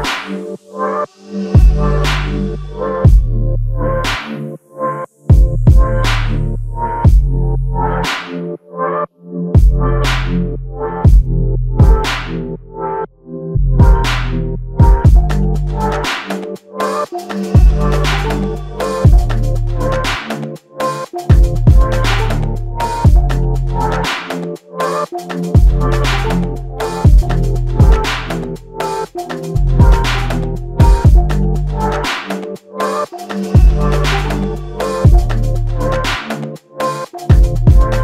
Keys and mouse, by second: 5.1 shift+click, 8.9 alt+click, 10.4 shift+click, 13.6 alt+shift+click, 18.7 double click, 27.0 shift+click, 28.6 shift+click, 31.9 ctrl+alt+click, 33.2 typing, 35.3 typing, 37.2 double click.